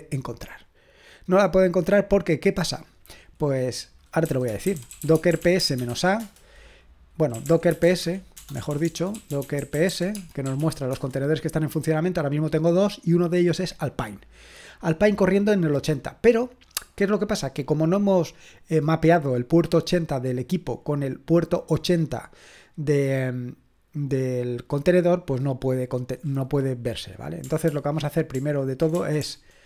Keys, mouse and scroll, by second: 0.5-2.6 drag, 2.6-3.2 scroll down 1, 3.2 scroll down 1, 3.4 click, 4.0-11.1 typing, 27.7 ctrl+p, 28.3 ctrl+p, 28.9-29.6 typing.